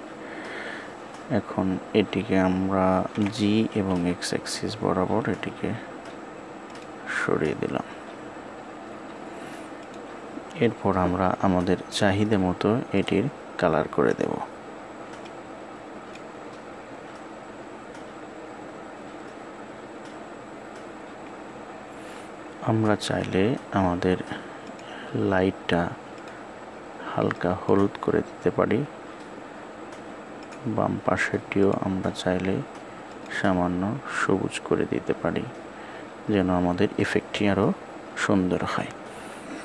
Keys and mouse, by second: 4.5 g.